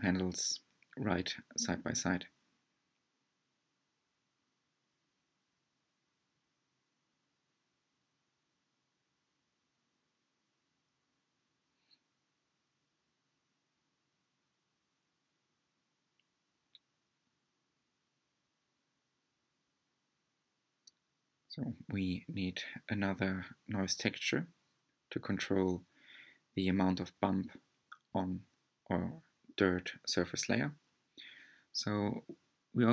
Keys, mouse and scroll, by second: 1.0-4.0 middle drag, 4.9-5.4 scroll up 3, 7.6-10.3 drag, 13.2-14.4 drag, 14.4-17.7 middle drag, 18.5-19.2 scroll up 4, 20.3 click, 21.6-23.8 middle drag, 23.8 click.